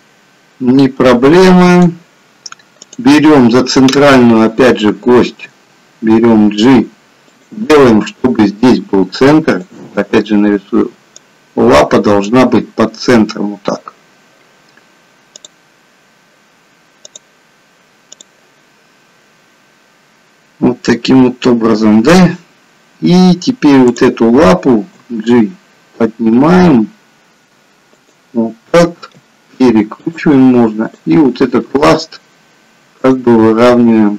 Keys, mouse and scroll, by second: 2.7 click, 5.6 g, 23.8 click, 25.1 g, 29.0 r, 30.9 click, 31.7 r.